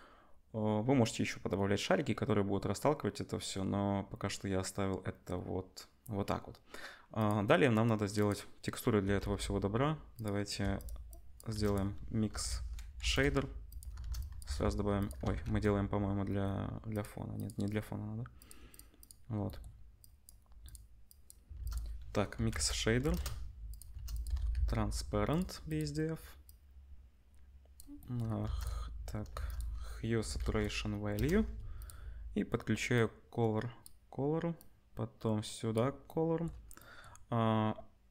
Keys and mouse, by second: 8.1-10.2 drag, 9.2 z, 10.2 middle click, 10.7-13.8 drag, 11.5 shift+a, 13.8-15.1 shift+middle drag, 14.0 shift+a, 15.2 ctrl+z, 15.4 ctrl+z, 16.9 click, 17.3 click, 18.4 click, 20.0-23.8 drag, 21.5 shift+a, 23.8-26.5 shift+middle drag, 23.9 shift+a, 26.5-28.6 drag, 28.4 shift+a, 28.6-32.9 middle drag, 29.3 shift+a, 32.9-38.1 drag.